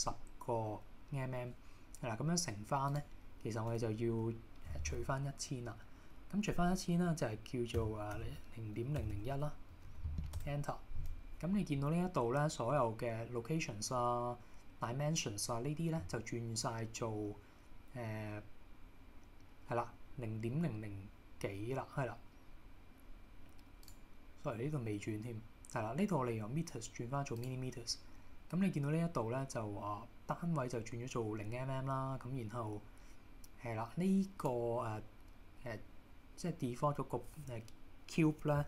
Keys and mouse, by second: 3.1-10.9 drag, 9.2 KP_0, 23.9-27.5 drag.